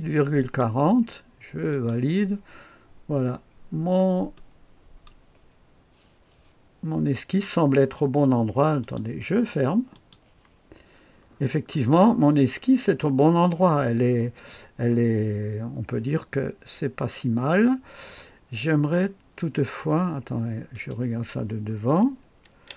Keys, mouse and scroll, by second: 0.4 click, 1.7 click, 4.3 right click, 8.8 click, 9.9 click, 11.3-12.0 scroll down 2, 12.0-15.5 scroll up 3, 15.5-18.7 scroll down 2, 18.7-20.7 scroll down 1, 20.7 click, 22.2-22.7 typing.